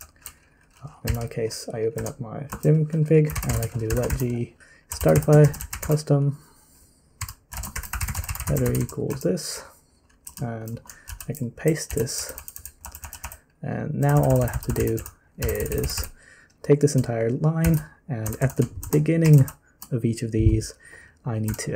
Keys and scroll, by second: 1.0-9.6 typing, 2.5 Return, 10.8-20.0 typing, 21.4-21.7 typing.